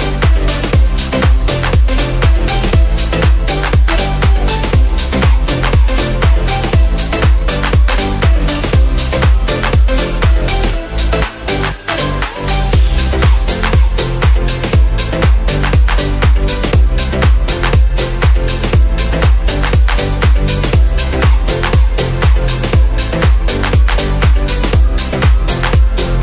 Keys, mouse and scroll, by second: 1.5 ctrl+z, 6.1 ctrl+z, 9.0 ctrl+z, 10.9 ctrl+z, 11.1 ctrl+z.